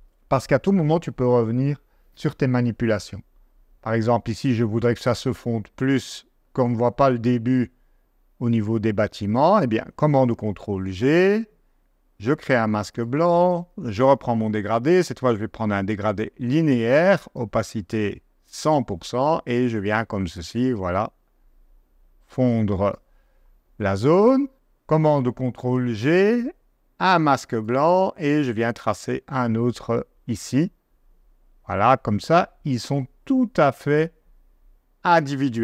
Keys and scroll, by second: 10.1 super+g, 14.0 g, 25.5 super+g.